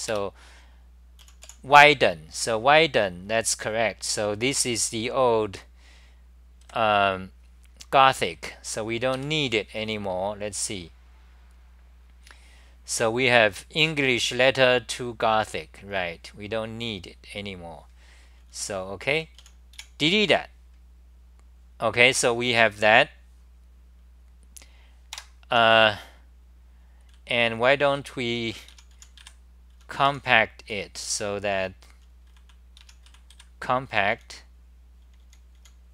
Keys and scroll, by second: 4.5 t, 6.6 1, 9.1 ctrl+g, 10.1-15.3 scroll down 32, 15.3-18.4 scroll down 32, 18.6 scroll down 3, 18.6-20.2 typing, 21.4-25.1 scroll up 23, 25.1 Tab, 25.1 scroll up 1, 27.1 scroll, 27.1-29.7 typing, 30.8-34.1 typing, 35.3-35.9 typing.